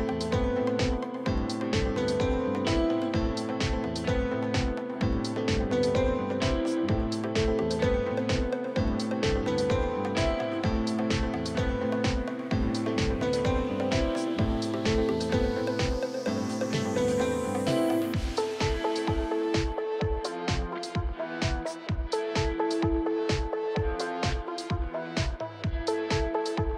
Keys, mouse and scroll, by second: 1.1 click, 1.8 e, 2.0 click, 2.5 r, 2.9 click, 3.3 s, 4.3 click, 4.8 r, 5.7 scroll up 6, 5.8 shift+middle click, 6.0 shift+middle click, 9.3 shift+middle click, 9.4 alt+click, 12.2 scroll up 1, 12.3 shift+middle click, 12.4-14.2 drag, 14.2-14.7 scroll down 11, 14.7 shift+middle click, 15.5 scroll up 2, 15.6 shift+middle click, 15.9 scroll down 2, 16.0 shift+middle click, 16.1 scroll up 1, 18.0 ctrl+r, 18.9 click, 19.5 shift+middle click, 19.9 ctrl+r, 20.6 click, 21.0 click, 21.9-23.2 shift+middle drag, 23.2 click, 24.0 shift+click, 24.3 middle click, 25.0 scroll down 5, 25.2 shift+middle click, 26.1 scroll up 1.